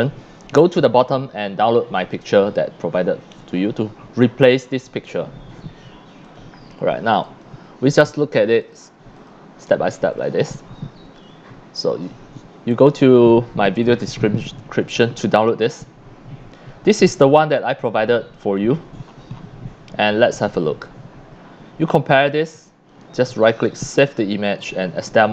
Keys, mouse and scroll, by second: 6.2 click, 7.2 click, 8.1 click, 8.6 click, 9.2 click, 9.6 click, 10.1 click, 13.8 click, 17.0 drag, 17.3 click, 19.0 middle click, 19.0 scroll down 2, 21.0 scroll up 1, 22.9 right click, 24.6 click.